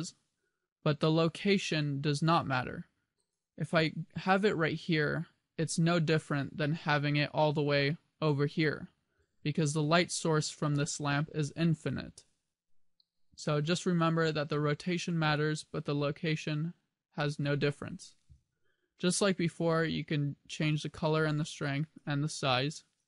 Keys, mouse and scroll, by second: 3.4 click, 5.8 g, 8.4 click, 8.6 scroll down 2, 9.2 g, 10.6 click, 15.3 click.